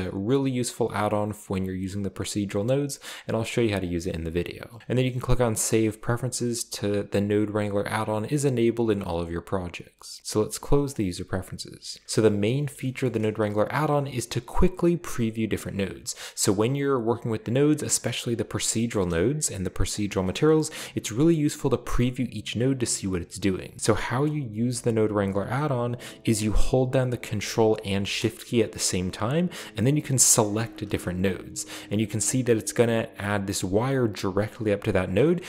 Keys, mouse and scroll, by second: 10.9 click, 11.8-12.4 scroll down 2, 12.0 middle click, 13.0 shift+middle click, 16.0-16.8 scroll down 3, 16.1 middle click, 18.5-19.3 scroll up 2, 19.7 scroll up 1, 20.0 click, 30.6 ctrl+shift+click, 31.3 click, 35.1 ctrl+shift+click.